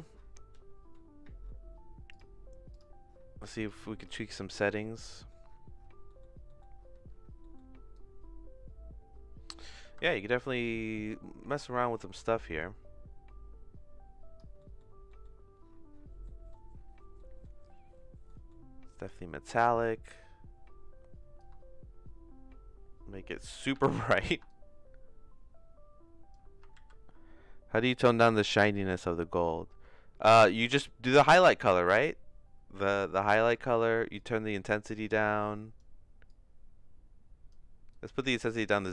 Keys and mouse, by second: 0.5 middle click, 2.2 click, 3.7 click, 4.7 middle click, 5.2 middle click, 6.1 middle click, 6.5 middle click, 7.4 middle click, 7.9-9.6 drag, 10.0 shift+middle click, 11.0-12.2 drag, 12.6-14.4 drag, 14.6 middle click, 15.1 middle click, 16.3 middle click, 17.2 middle click, 18.3 middle click, 21.4-23.5 shift+drag, 23.9 ctrl+z, 24.5-26.3 drag, 26.8 ctrl+z, 31.3-32.9 shift+drag, 33.8 ctrl+z, 34.2-35.8 drag, 36.4-37.5 drag, 37.9 click.